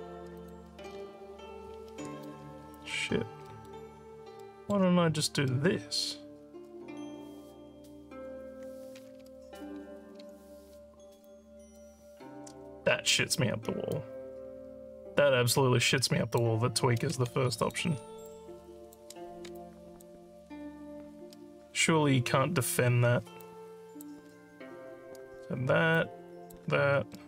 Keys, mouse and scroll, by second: 0.4 click, 1.9 ctrl+s, 2.8 alt+scroll up 2, 3.5 alt+middle click, 4.4 alt+middle click, 10.2 w, 11.2 click, 13.9-16.4 drag, 17.4 alt+click, 18.3 shift+click, 19.5 alt+click, 23.4 click, 25.9 shift+click.